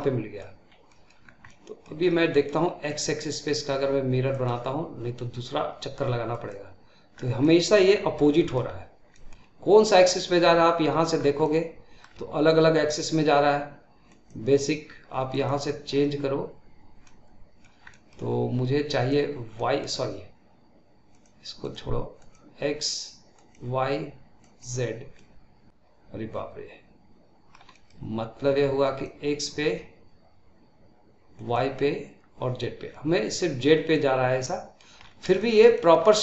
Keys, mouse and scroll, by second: 0.6 scroll up 1, 0.8 middle click, 1.1 scroll down 2, 1.3-1.9 middle drag, 1.9-2.2 scroll up 2, 2.2-4.2 middle drag, 4.2-7.0 drag, 7.0 scroll down 2, 7.3-10.1 middle drag, 10.1 click, 11.0 scroll down 1, 11.3-12.7 middle drag, 12.7-16.9 drag, 16.9-18.8 middle drag, 18.8 click, 19.4-21.0 middle drag, 21.0-24.5 drag, 25.1-28.8 middle drag, 28.8-32.8 drag, 32.8-33.5 middle drag, 33.5 scroll up 2, 33.8-34.9 middle drag, 34.9-35.3 scroll up 2, 35.3-36.1 shift+middle drag, 36.1 scroll down 2.